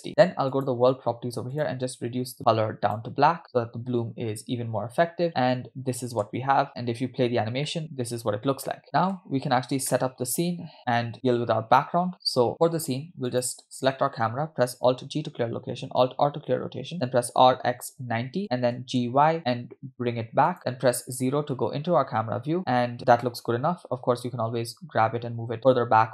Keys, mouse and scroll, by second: 0.5 click, 1.6 click, 5.3-6.3 middle drag, 6.7 space, 7.7-8.2 middle drag, 8.7 space, 9.2 space, 9.5-9.9 scroll down 3, 9.9-11.5 middle drag, 13.3 click, 15.8 alt+g, 16.2 alt+r, 17.1 r, 18.8 g, 21.0 KP_0, 22.9 space, 23.5 space, 24.1 g.